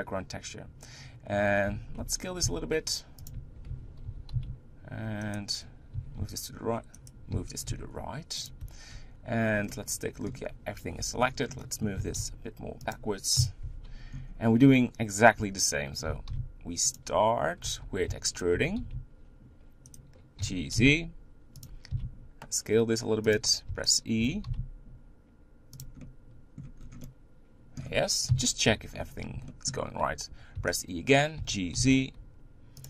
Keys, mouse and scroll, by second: 1.7 Tab, 2.0 Tab, 2.4 s, 3.7 Tab, 4.1 g, 6.0 g, 7.3 g, 8.6 Tab, 8.9-9.4 scroll up 2, 9.4 scroll down 2, 9.7-11.0 middle drag, 11.0 Tab, 11.3 scroll down 2, 11.6 middle click, 12.0 g, 13.3 KP_1, 13.6 Tab, 14.1-15.4 scroll up 4, 15.4 Tab, 16.1 g, 17.6 Tab, 18.0 e, 18.5 g, 20.4 g, 21.9 s, 23.7 e, 24.2 g, 26.0 middle click, 26.8 scroll down 3, 27.0-28.3 middle drag, 28.3 KP_1, 28.9-29.5 scroll up 4, 29.5 shift+middle click, 29.9-30.5 scroll up 1, 30.5 e, 31.4 g.